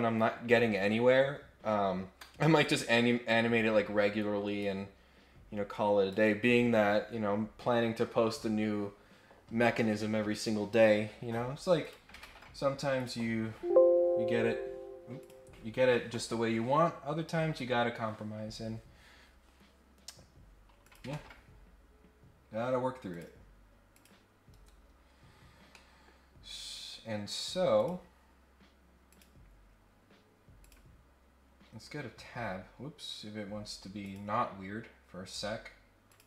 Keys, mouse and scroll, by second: 3.2-4.6 drag, 5.7 click, 11.8 click, 12.9 click, 15.2 click, 20.8 click, 21.1 ctrl+Tab, 23.0 click, 23.9 click, 25.7 middle click, 27.7 click, 29.0 click, 30.6 click, 34.0 click, 36.0 click.